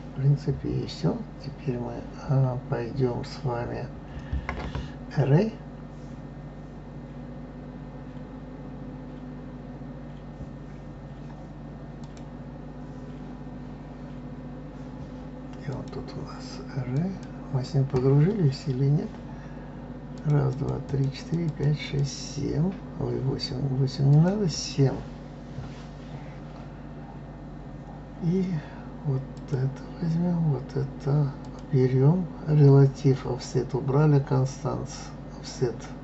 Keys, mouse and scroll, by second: 12.0 click, 15.6-18.7 drag, 20.1-22.5 drag, 24.2 click, 29.3 click, 31.4 click.